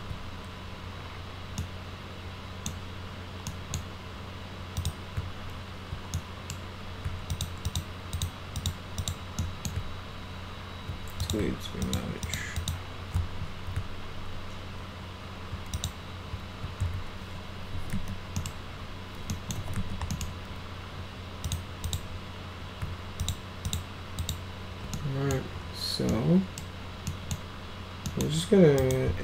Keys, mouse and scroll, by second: 1.6-2.7 middle drag, 3.5 middle click, 4.8 click, 6.2 middle click, 7.3 ctrl+click, 7.7 ctrl+click, 8.2 ctrl+click, 8.6 ctrl+click, 9.0 ctrl+click, 9.4 middle click, 11.2 click, 11.8 ctrl+click, 12.3 ctrl+click, 12.6 ctrl+click, 15.8 click, 17.5-20.3 typing, 18.4 middle click, 19.3 middle click, 20.1 middle click, 21.5 click, 21.9 click, 23.2 ctrl+click, 23.7 ctrl+click, 24.2 ctrl+click, 25.0 middle click, 26.1 middle click, 27.1 middle click, 28.1 middle click, 28.8 right click.